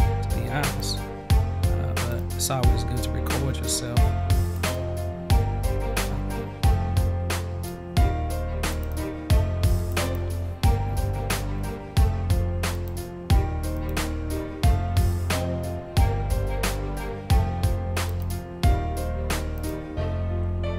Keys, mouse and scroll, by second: 2.0-3.6 drag, 4.5 click, 4.7-7.6 drag, 8.7 click, 8.9-9.9 drag, 10.0 click, 12.7 click, 13.7 click, 14.0-18.0 drag, 18.2 click, 19.6 click.